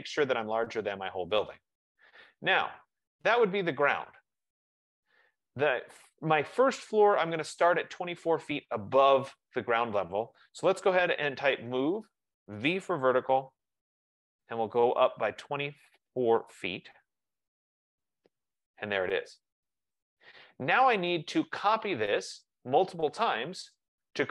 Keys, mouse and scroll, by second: 2.4 click, 2.5 click, 8.3 click, 11.0-13.6 typing, 15.2 click, 17.0-18.2 typing, 22.9 typing.